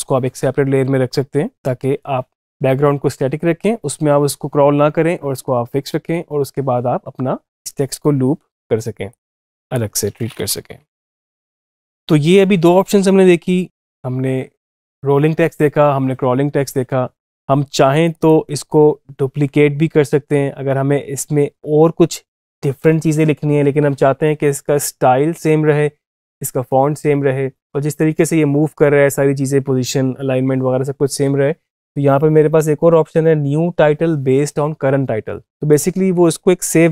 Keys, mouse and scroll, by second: 9.0-10.6 drag, 11.2 click, 17.9 click, 35.6 click.